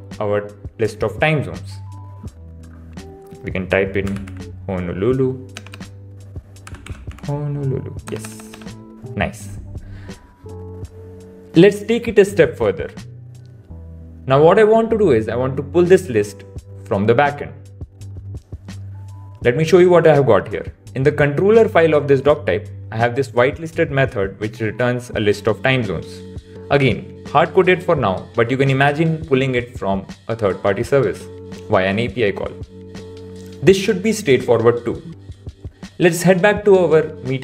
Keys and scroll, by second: 5.5 BackSpace, 8.1 BackSpace.